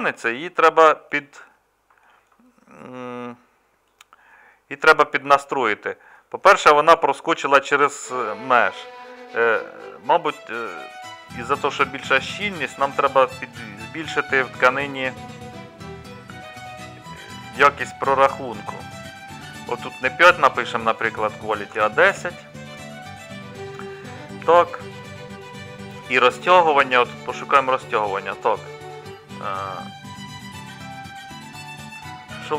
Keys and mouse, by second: 0.0-1.9 middle drag, 2.3-4.3 middle drag, 4.3-7.3 drag.